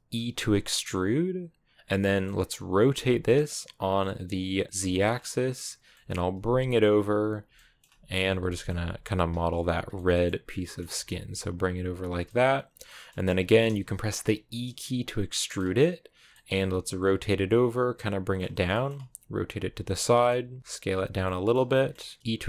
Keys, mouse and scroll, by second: 0.0 e, 1.8 middle click, 2.7 r, 5.7 middle click, 6.1 g, 7.4 middle click, 7.7 g, 8.3 middle click, 8.6 g, 9.0 s, 9.3 g, 9.8 middle click, 10.3 scroll down 2, 10.4 middle click, 10.7 r, 11.0 g, 11.9 click, 12.1-13.3 middle drag, 13.3 r, 14.1 e, 16.2 middle click, 16.4 r, 17.0 g, 17.8-18.8 middle drag, 18.8 r, 19.4 g, 20.0 middle click, 20.4 s, 20.6 g, 21.0 middle click, 21.8 r, 22.1 g, 22.2 e.